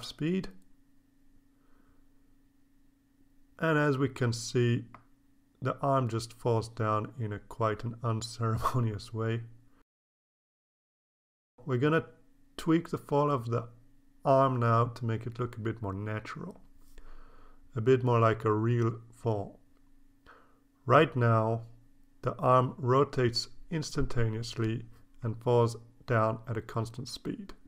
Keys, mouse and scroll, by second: 1.4-2.5 drag, 2.6 click, 3.7 1, 5.6 click, 8.0 click, 9.0 scroll up 2, 10.6-12.3 drag, 13.1 click, 14.0 click, 14.4-16.0 drag, 16.3 scroll up 1, 18.1-27.6 drag.